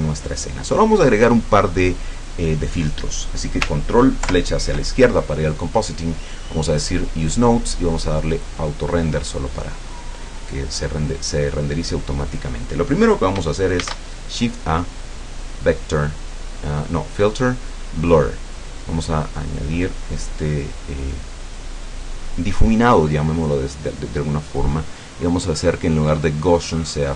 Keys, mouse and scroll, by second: 4.3 ctrl+Left, 7.0 click, 8.4 click, 9.6-10.2 drag, 11.7-12.6 drag, 13.9 shift+a, 18.5 click, 19.5 click, 20.7-21.8 drag, 24.5 click.